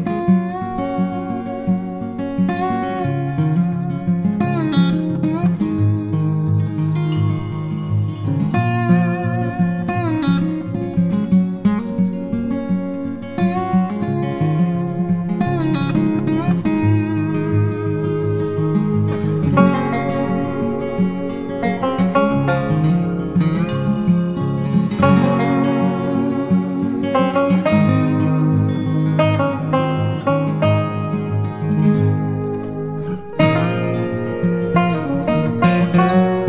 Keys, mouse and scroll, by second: 22.0 double click, 35.5-36.4 typing.